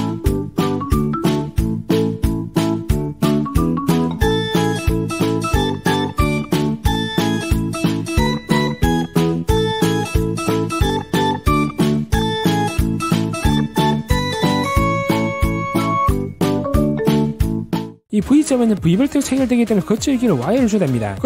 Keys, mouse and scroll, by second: 0.5 d, 0.8 click, 1.0 click, 2.0 click, 2.8 click, 3.2 click, 3.4 click, 3.7 click, 3.8 click, 4.1 click, 4.2 click, 4.4 click, 4.5 click, 5.1 click, 5.7 click, 5.8 click, 6.8 click, 6.9 click, 7.2 click, 8.0-10.6 typing, 8.3 click, 8.4 right click, 8.8 click, 9.0 middle click, 9.3 click, 9.4 right click, 10.0 click, 10.1 right click, 10.5 click, 10.8 click, 11.2 click, 11.5 click, 11.7 middle click, 12.1 click, 12.7 click, 12.9 click, 13.1 click, 13.4 click, 13.7 click, 13.9 click, 14.2 click, 14.4 click, 14.7 click, 14.9 middle click, 15.2 middle click, 15.3 click, 15.5 click, 16.1 click, 16.6 click, 16.9 5, 17.1 click, 17.4 click, 17.5 click, 17.8-18.1 scroll up 2.